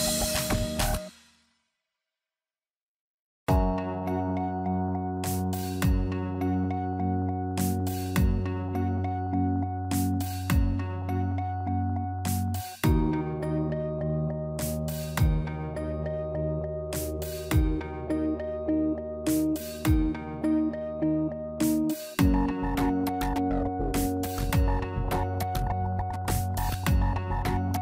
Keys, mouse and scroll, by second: 1.3 a, 2.3 shift+s, 5.0 Tab, 7.9 shift+s, 12.4 shift+a, 19.5 scroll up 3, 20.4 KP_1, 21.2 shift+middle click, 21.5 scroll up 4, 22.6 click, 24.5 scroll down 2, 24.6 middle click, 26.2 Tab, 26.8 middle click.